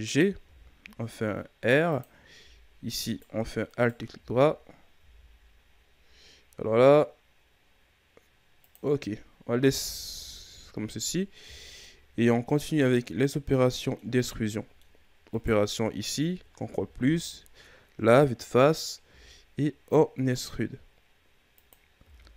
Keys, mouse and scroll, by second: 0.4 r, 3.0 alt+right click, 3.7 alt+right click, 4.9 g, 8.9-9.6 scroll down 2, 9.8 scroll up 1, 10.4-11.4 ctrl+scroll down 3, 11.4 Tab, 11.8-14.2 middle drag, 14.2 Tab, 14.5 middle click, 15.3 right click, 16.3 ctrl+KP_Add, 17.0 KP_1, 19.0 e, 22.0 r.